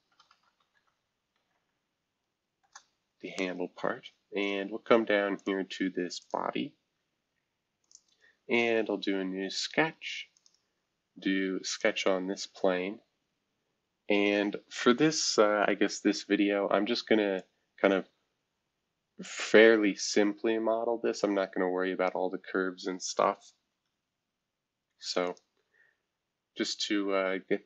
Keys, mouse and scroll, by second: 0.0-2.0 typing, 2.6 Return, 5.4 click, 6.2 click, 7.8 click, 10.3 click, 11.7 click, 16.2 F2, 17.3-22.1 drag, 23.5 shift+F2, 25.2 click, 26.2-27.6 scroll up 1.